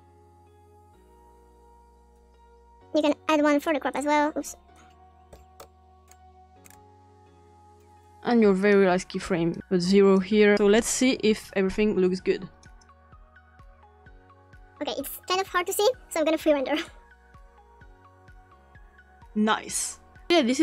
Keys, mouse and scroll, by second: 2.1-2.6 drag, 3.0 click, 3.9 drag, 4.7 click, 5.2 0, 5.3 click, 5.6 Return, 6.1-7.2 scroll up 3, 6.4 click, 7.8 click, 8.6 click, 9.5 click, 9.6 Return, 9.6 0, 10.9 click, 12.6 click, 14.3 click, 16.7 click, 19.5 click.